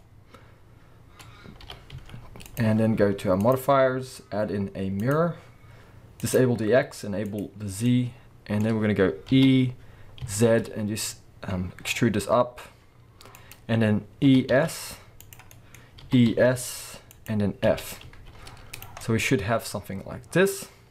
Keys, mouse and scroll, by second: 1.6 g, 2.6 click, 3.4-6.3 drag, 7.3 click, 7.9-13.5 middle drag, 9.3 e, 13.5 click, 14.3-15.3 middle drag, 14.3 e, 15.3 click, 15.5-17.3 middle drag, 15.7-16.0 scroll up 2, 16.0 e, 17.3 click, 17.6 f, 18.0 z, 19.0-20.9 middle drag.